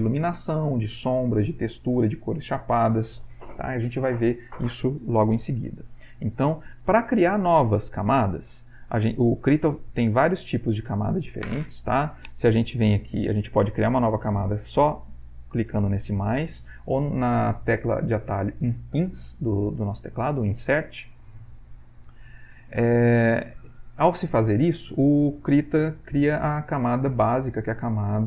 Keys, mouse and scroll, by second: 8.6 Delete, 10.1 click, 10.8 click, 15.6 click, 19.1 Insert, 22.3 click.